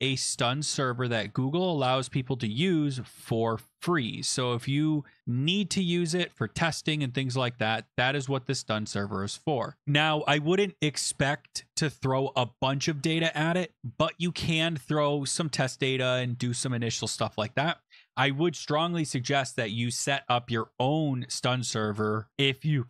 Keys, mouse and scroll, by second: 1.7 click, 3.6 Right, 5.0 BackSpace, 7.8 click, 9.8 click, 13.8 click, 15.2 click.